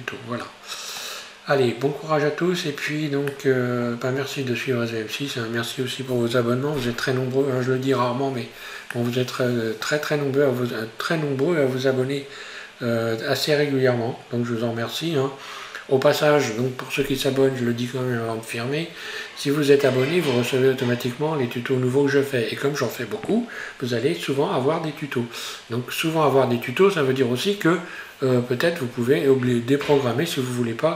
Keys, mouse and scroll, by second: 0.0-0.5 scroll up 1, 0.5-6.4 middle drag, 8.7 scroll down 1, 9.0-12.2 middle drag, 14.9 scroll up 1, 16.0 scroll up 1.